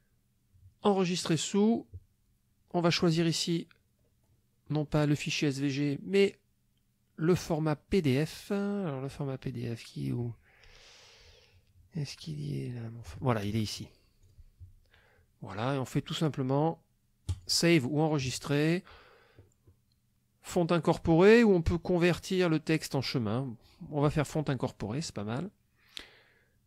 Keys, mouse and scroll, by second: 1.3 click, 3.1 click, 3.7-4.2 scroll down 1, 4.3-4.6 scroll down 1, 14.3 click, 17.3 click.